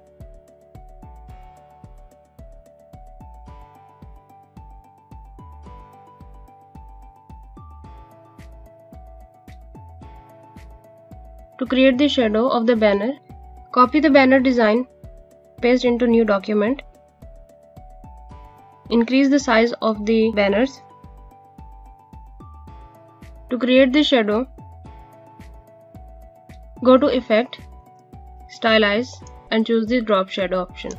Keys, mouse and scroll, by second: 3.5 scroll up 1, 3.7 space, 3.8 click, 3.9 space, 4.3 click, 6.7 click, 9.9 alt+scroll down 1.